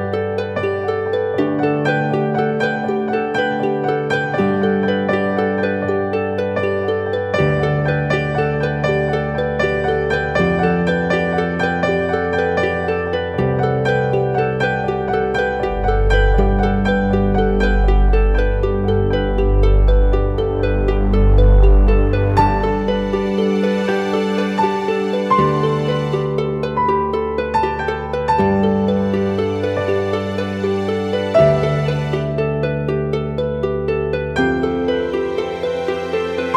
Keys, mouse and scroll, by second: 0.6 shift+click, 0.9 shift+click, 5.4 shift+click, 7.3 shift+click, 7.6 shift+click, 10.3 shift+click, 14.8 ctrl+t, 20.2 alt+shift+click, 29.6 Return.